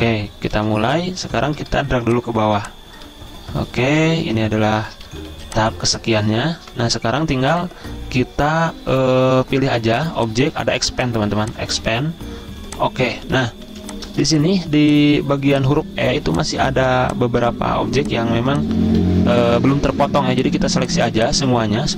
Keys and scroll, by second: 0.8 v, 5.5 z, 6.9 v, 13.9-15.4 typing, 16.4 z, 19.1 ctrl+z.